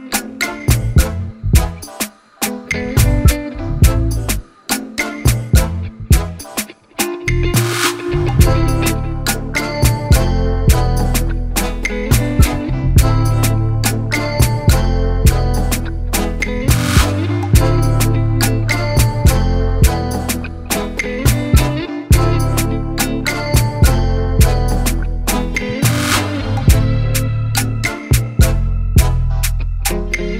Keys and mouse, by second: 0.0-8.2 typing, 10.7 click, 11.3 alt+click, 14.1 click, 21.0 click, 22.6 click, 23.4 ctrl+], 24.1 ctrl+], 24.4 ctrl+], 24.8 ctrl+], 25.3 ctrl+], 26.9 ctrl+], 28.2 click, 29.1-30.3 typing.